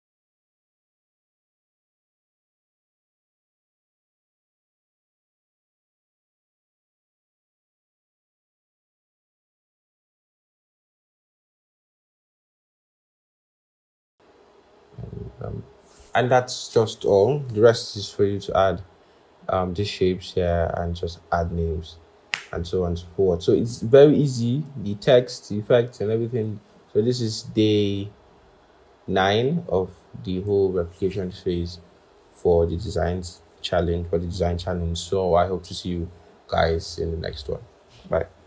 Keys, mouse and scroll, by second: 0.1 alt+click, 0.9 double click, 1.0 ctrl+a, 1.1-2.1 typing, 2.5 Return, 3.3 Return, 3.5 Down, 3.7 Return, 4.1-7.9 typing, 9.2 ctrl+shift+., 9.4 ctrl+shift+,, 9.5 Right, 10.6 scroll up 1, 10.8 ctrl+-, 10.9 scroll, 11.0 scroll up 1, 11.1 scroll, 11.3 scroll down 1, 11.4-12.1 scroll, 12.7 typing, 14.1-17.2 scroll up 1, 27.0 i, 29.3 typing.